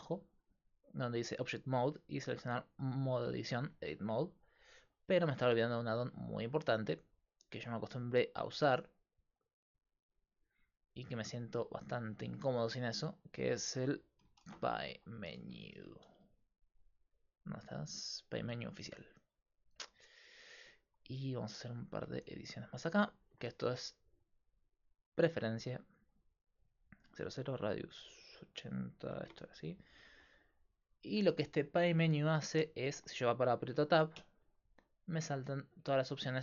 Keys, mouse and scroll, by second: 0.2 click, 1.5 click, 2.9-4.4 drag, 6.0-9.7 drag, 31.7-34.2 middle drag, 34.2 Tab.